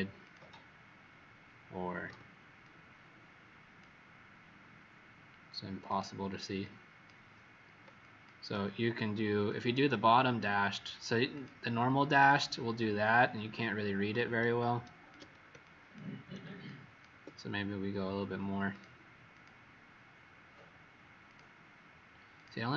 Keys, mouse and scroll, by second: 2.0 z, 2.6 click, 5.8 click, 7.9 shift+click, 9.4 click, 15.5 shift+click, 16.6 shift+click, 18.6 click, 19.2 click, 21.2 click.